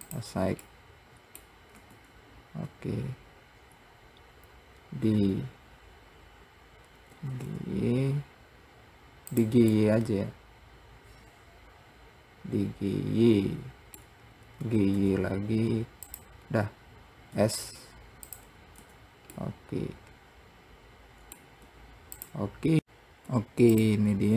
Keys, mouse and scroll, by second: 0.9-2.1 middle drag, 2.1 Tab, 3.0 Tab, 10.1-13.0 middle drag, 19.6-21.9 middle drag, 22.8 click.